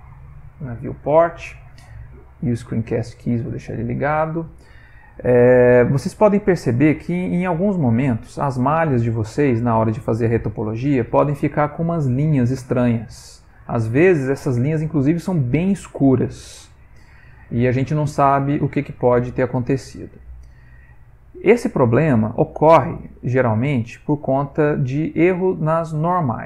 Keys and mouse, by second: 4.1 middle click, 4.2 middle click, 5.1-6.6 middle click, 6.5 middle click, 6.6 middle click, 7.6 shift+middle click, 8.2 middle click, 8.7 middle click, 9.5 ctrl+middle click, 10.0 middle click, 13.1 middle click, 13.3 middle click, 16.7-17.1 middle click, 16.9 middle click, 17.3 shift+middle click, 18.1 middle click, 18.6 shift+middle click, 20.0 middle click, 20.1 middle click, 20.5 middle click, 20.9 ctrl+middle click, 21.6 middle click, 21.7 middle click, 22.5 shift+middle click, 22.7 shift+middle click, 24.7 click.